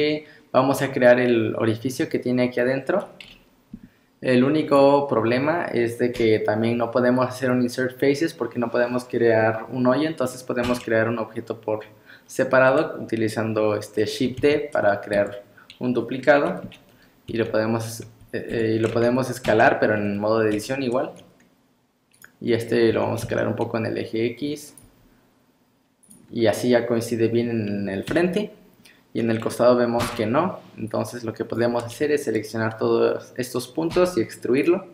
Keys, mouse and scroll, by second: 0.7 scroll down 1, 3.3 KP_3, 4.4-6.2 scroll up 3, 6.2 KP_1, 10.3-10.6 scroll down 5, 10.6 Tab, 11.8 scroll up 1, 13.4 scroll up 4, 14.4 shift+d, 16.7 KP_3, 17.3 s, 19.0 KP_1, 19.5 Tab, 19.5 \, 20.6 s, 22.5 scroll up 3, 22.9 s, 24.9 g, 26.4 scroll down 2, 28.1 KP_3, 30.0 1, 30.9 click, 31.8-33.1 scroll down 1, 33.1 scroll down 1.